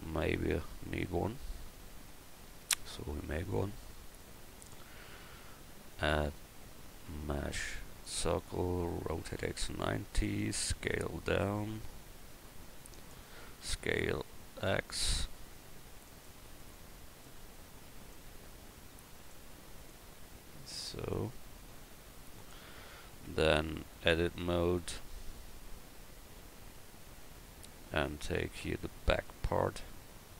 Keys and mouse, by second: 5.9-6.4 drag, 9.1 r, 10.7 s, 13.6 s, 16.8-22.4 drag, 21.6 s, 23.3 Tab, 23.9 click, 28.0 a, 29.3 b.